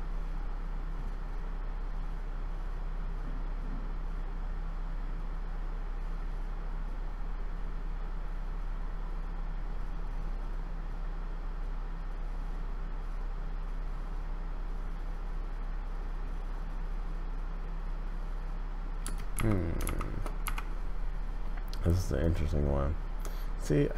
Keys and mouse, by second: 19.0 space, 19.3 Left, 20.4 Left, 22.2-23.9 drag.